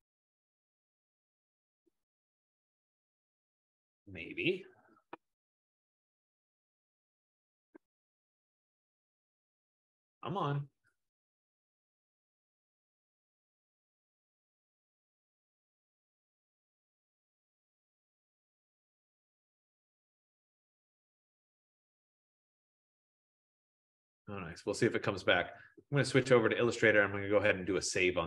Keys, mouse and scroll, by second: 3.5-8.5 drag, 9.8-14.9 drag, 19.6 click, 20.9 F15, 26.5 click.